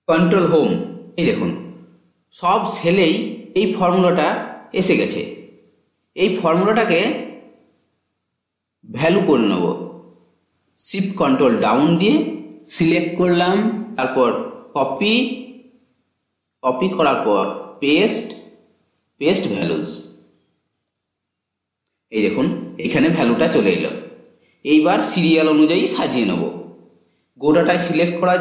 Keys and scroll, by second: 0.1 ctrl+Home, 11.4 ctrl+shift+Down.